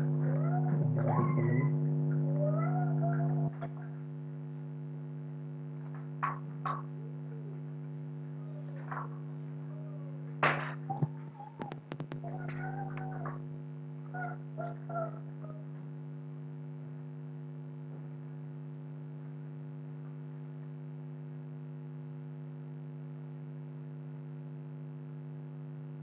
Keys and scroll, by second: 1.1 ctrl+g.